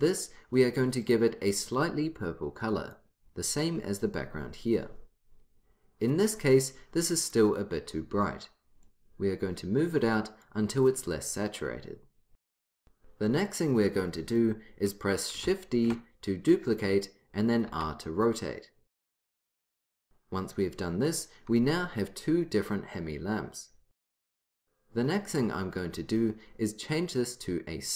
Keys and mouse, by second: 1.1-3.1 drag, 7.3-8.9 drag, 15.9 shift+d, 17.8 r, 21.2 right click.